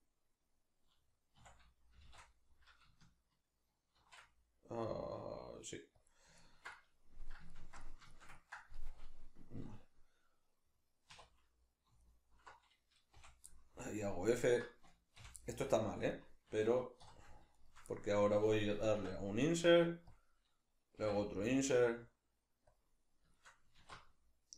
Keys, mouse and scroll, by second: 1.4 s, 6.1 click, 6.4-12.0 ctrl+middle drag, 11.1 2, 12.0 alt+right click, 13.3 f, 13.5-14.4 middle drag, 14.4 alt+right click, 15.3 f, 15.4-17.5 middle drag, 17.1 3, 17.5 shift+right click, 17.9-20.2 middle drag, 19.1 i, 20.2 click, 22.8 click, 22.9-24.5 middle drag, 23.8 alt+e.